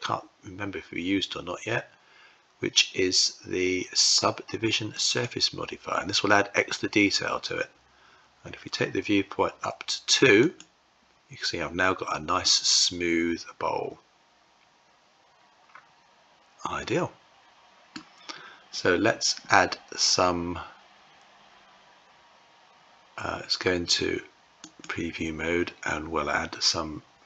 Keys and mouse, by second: 10.2-12.0 drag, 12.0-17.6 middle drag, 24.8-27.2 drag.